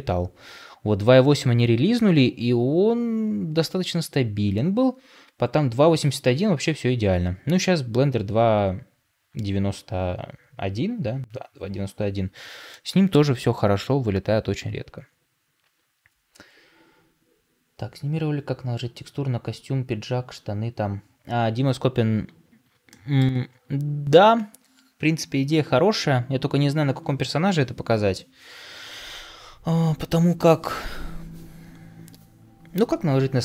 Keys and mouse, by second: 12.9 middle click, 22.8 shift+middle click.